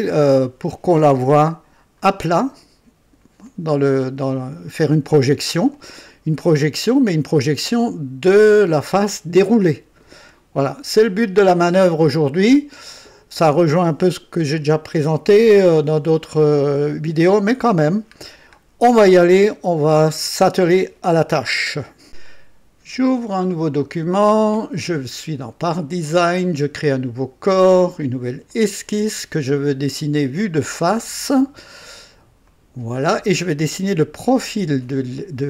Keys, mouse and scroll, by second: 1.2 KP_1, 2.0-2.7 right drag, 3.5-4.9 drag, 5.7-7.2 drag, 9.1 click, 10.3-12.5 drag, 12.7-13.7 right drag, 18.3 scroll down 1, 19.1-20.2 right drag, 22.1 click, 23.3 click, 27.1 click, 28.5 click, 30.2 click, 32.4 click, 33.8-34.7 right drag.